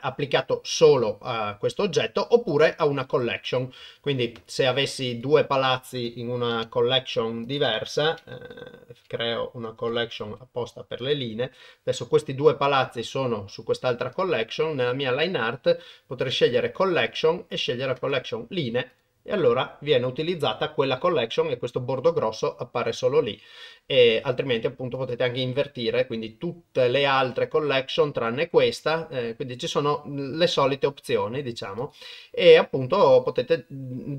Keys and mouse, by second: 2.5-3.6 drag, 4.7 click, 6.5 m, 10.3 e, 14.1 click, 17.0-18.2 drag, 18.9 click, 25.0 click, 31.8-33.2 drag.